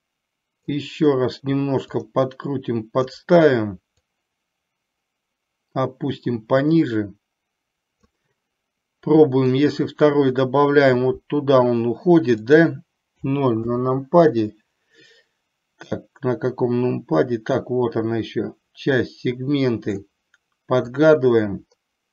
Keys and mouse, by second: 2.2-3.2 drag, 4.3-8.3 drag, 9.7 click, 12.8-13.9 drag, 15.9-20.1 drag, 21.1-22.1 drag.